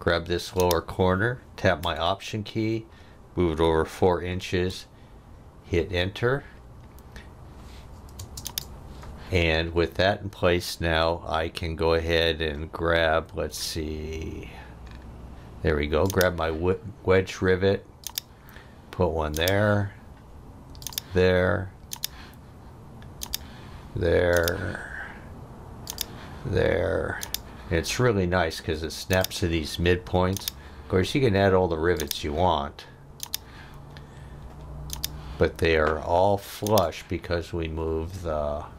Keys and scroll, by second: 4.0 4, 4.7 Return, 8.2 space.